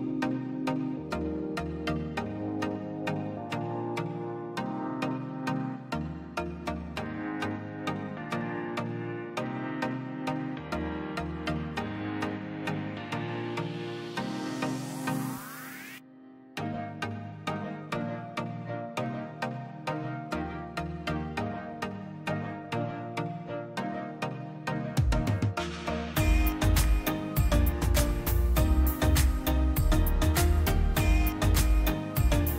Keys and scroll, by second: 11.9 a, 12.7 a, 13.0 u, 14.8 s, 17.9 KP_Divide, 18.5 Tab.